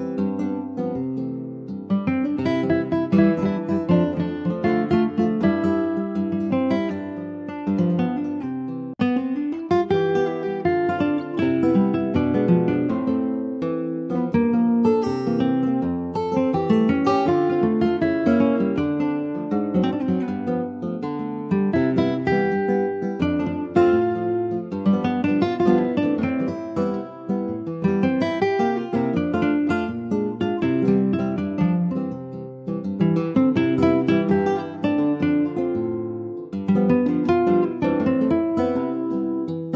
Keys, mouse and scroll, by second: 0.0 ctrl+b, 4.7 Tab, 4.9 click, 5.2 scroll down 3, 5.4 middle click, 6.1 ctrl+s, 6.4 middle click, 6.7-7.4 scroll up 2, 6.9 click, 7.4 Tab, 7.9 click, 8.8 ctrl+b, 13.0 Tab, 13.2 click, 13.5 scroll down 2, 13.7-15.3 middle drag, 15.3-15.7 scroll up 3, 15.7 middle click, 16.1 ctrl+z, 16.2 ctrl+z, 16.9 middle click, 17.4 scroll up 1, 18.5 ctrl+b, 24.2 middle click, 25.0 click, 25.5 middle click, 26.1 ctrl+b, 28.2 middle click, 28.5 Tab, 28.9 click, 29.1 scroll down 3, 29.3-30.7 middle drag, 30.7 ctrl+s, 30.9-34.0 middle drag, 36.2 middle click, 36.8 middle click, 37.2 click, 37.5 Tab, 37.8 scroll up 2, 38.1 click, 39.4 click.